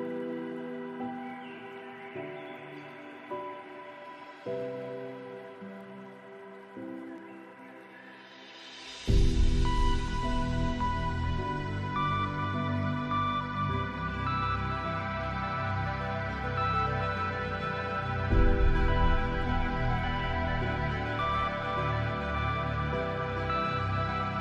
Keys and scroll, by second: 2.3 ctrl+space, 6.7 ctrl+z, 9.0 ctrl+space.